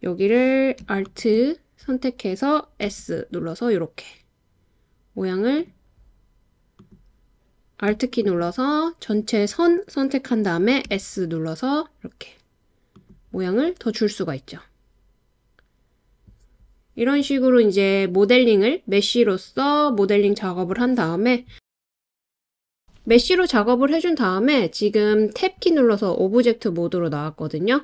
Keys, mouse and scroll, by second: 2.9 s, 5.6 click, 8.2 alt+click, 10.8 s, 12.9 click, 22.6 Tab.